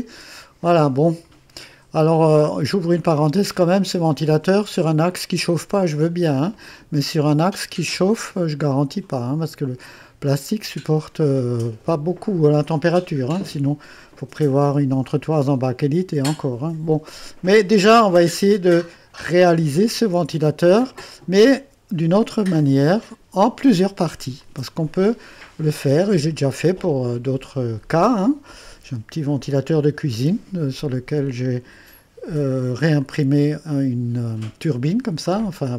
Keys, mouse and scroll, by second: 0.6-1.5 drag, 2.8-3.1 scroll down 2, 3.3-4.0 drag, 4.1 right click, 12.6-13.9 drag, 23.0 click, 24.4-25.6 drag, 26.6-27.9 drag, 33.0-34.8 drag, 35.2 click.